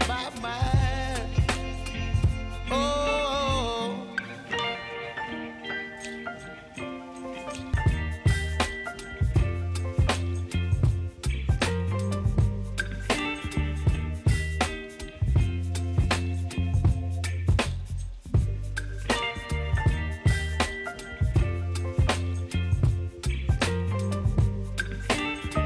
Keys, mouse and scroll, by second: 7.4 shift+Num_Lock, 7.4 click, 8.2 [, 8.6 click, 10.6 ctrl+x, 11.1 scroll down 1, 12.1 click, 12.6 ctrl+v, 13.4 scroll up 1, 14.4 click, 15.2 ctrl+x, 15.5 scroll down 1, 16.2 click, 16.9 ctrl+v, 17.2 scroll up 1, 17.8 click, 18.1 ctrl+x, 18.8 click, 19.2 ctrl+v, 19.6 click, 20.1 ctrl+x, 20.6 click, 21.0 ctrl+v, 21.5 click, 21.9 ctrl+x, 22.5 click, 22.9 ctrl+v, 23.4 space, 24.9 click.